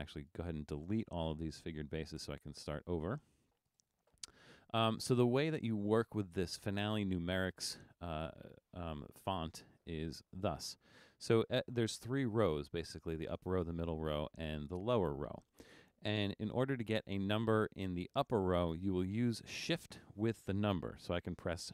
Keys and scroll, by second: 2.4 BackSpace.